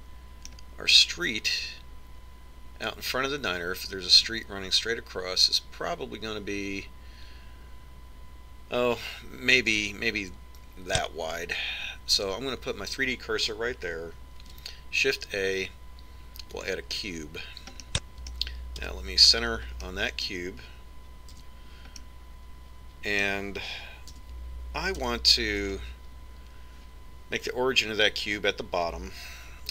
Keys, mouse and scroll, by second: 1.1-3.0 middle drag, 10.9 click, 15.7 shift+a, 19.1-20.2 middle drag, 20.2 KP_Decimal, 22.7 z, 25.5 z, 26.4 KP_3.